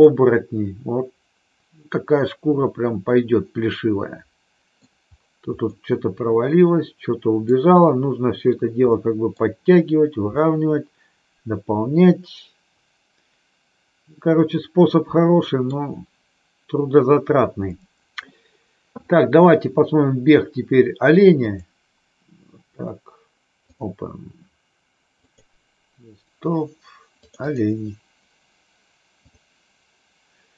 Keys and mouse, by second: 0.1-4.9 middle drag, 6.1-7.6 middle drag, 9.0 middle click, 10.6-15.7 middle drag, 21.5-24.1 drag.